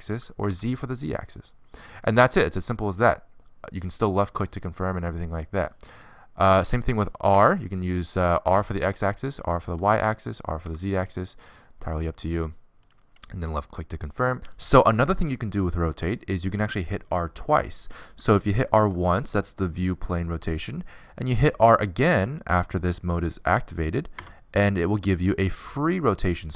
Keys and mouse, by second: 8.2 r, 19.6 r.